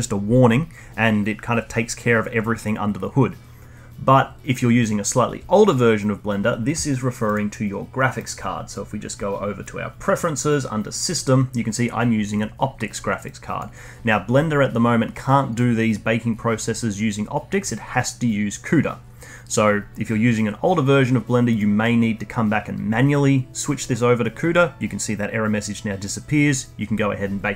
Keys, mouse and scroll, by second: 7.2-10.4 drag.